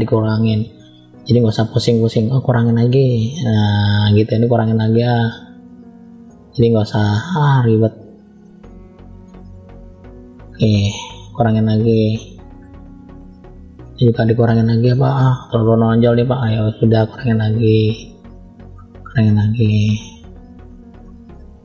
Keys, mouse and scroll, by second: 0.0 middle click, 0.9 scroll up 1, 2.0 click, 2.0 scroll up 1, 2.6 click, 4.4 click, 6.2 middle click, 7.1 click, 8.4 click, 8.8 click, 9.4 middle click, 10.1 click, 11.1 click, 12.0 middle click, 12.8 click, 13.8 middle click, 14.8 middle click, 15.9 click, 18.0 middle click, 18.9 click, 20.5 middle click, 21.3 click.